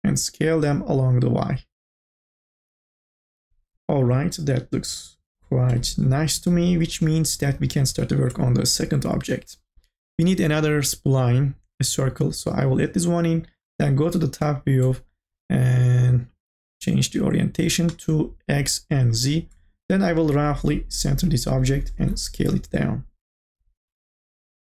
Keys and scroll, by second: 21.9 t, 24.2 e.